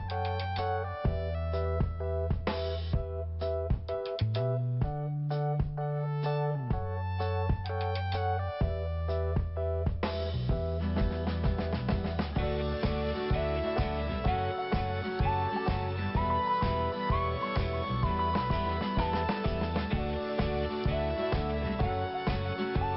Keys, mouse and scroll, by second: 2.3-2.8 scroll down 2, 3.6 click, 9.1 click, 9.1 click, 10.9 click, 11.3 click, 17.0 click, 18.4 scroll up 1, 19.8 click, 19.9 click, 21.5 click, 21.6 click.